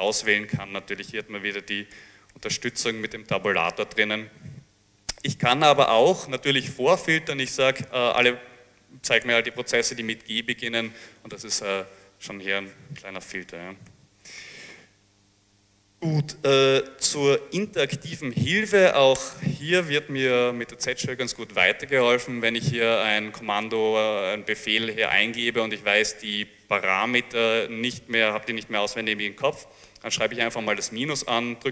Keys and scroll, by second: 0.1 Tab, 0.1 Tab, 0.3 Tab, 2.4 Escape, 2.8 Escape, 3.9 ctrl+c, 8.1 g, 9.3 Tab, 13.9 ctrl+c, 14.5 ctrl+c, 15.2 Return, 15.4 Return, 18.6-19.4 typing, 21.0 ..